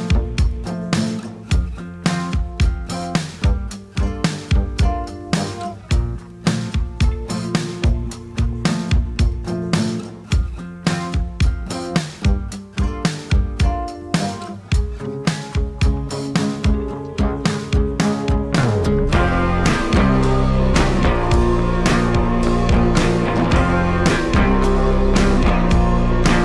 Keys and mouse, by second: 0.5 click, 1.5-2.9 drag, 4.3 ctrl+r, 4.9 n, 6.2-9.4 drag, 10.8 f, 11.3 click, 12.5 f, 12.8 click, 14.1 f, 15.7-18.9 drag, 19.3 ctrl+z, 19.6-20.8 drag, 21.1-23.5 drag, 23.0 ctrl+z, 23.6 click, 24.2 click, 24.5 click, 24.8 click, 25.1 click, 25.3 middle click, 25.7 click, 25.9 click.